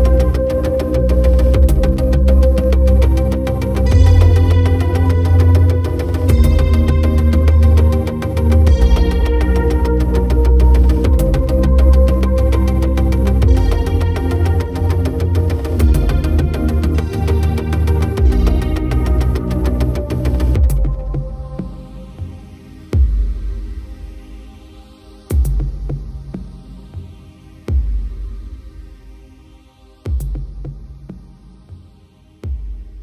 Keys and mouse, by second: 0.0 right click, 1.2 right click, 2.5 right click, 3.2 right click, 3.4 right click, 3.8 right click, 4.3 right click, 5.8 right click, 7.1 right click, 8.3 right click, 9.5 right click, 11.0 right click, 12.4 right click, 17.0 right click, 17.4 right click, 18.5 right click, 19.7 right click, 20.1 right click, 21.7 right click, 24.1 right click, 24.6 right click, 26.1 right click, 26.5 right click, 26.9 right click, 27.3 right click, 28.6 right click, 31.8 right click.